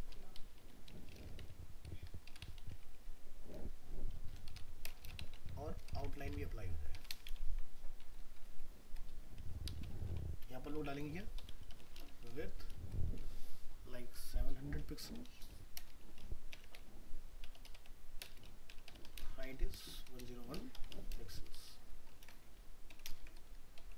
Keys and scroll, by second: 6.2 ctrl+x, 7.3 ctrl+v, 10.0 ctrl+s, 22.2 ctrl+c, 23.1 ctrl+Return, 23.2 ctrl+v.